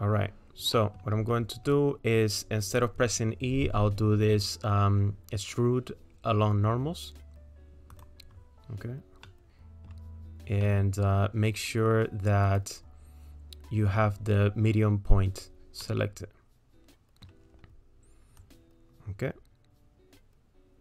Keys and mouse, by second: 0.8 click, 7.9 click, 9.3 middle click, 10.6 middle click, 12.5-15.4 drag, 15.8 middle click, 16.2-17.2 drag, 17.2 middle click, 18.4-20.8 drag.